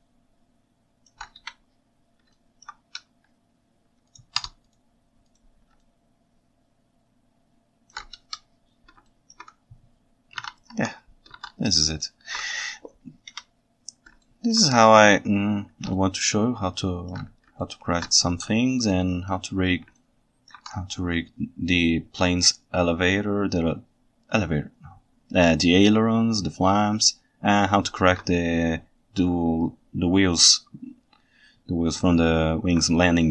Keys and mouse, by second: 0.0-1.2 ctrl+shift+right drag, 1.4 KP_1, 2.4 right drag, 4.5 Tab, 5.8-7.9 right drag, 8.2 KP_7, 9.1 ctrl+alt+right click, 10.4 alt+a, 10.8 Tab, 11.4 alt+a, 12.0 ctrl+alt+middle drag, 13.3 KP_1, 14.3 ctrl+alt+right drag, 14.5 ctrl+alt+click, 16.0 ctrl+shift+right click, 16.1-17.2 ctrl+shift+drag, 17.6-18.1 ctrl+alt+drag, 18.3 shift+s, 20.0-20.5 ctrl+alt+drag, 27.8-28.1 ctrl+alt+right drag, 32.4 ctrl+alt+right click.